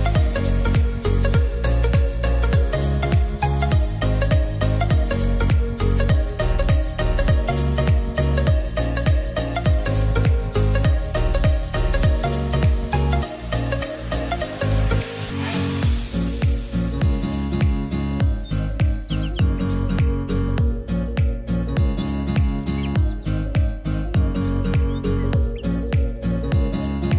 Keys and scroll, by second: 12.9 ctrl+s, 24.3 r, 27.0-27.1 typing.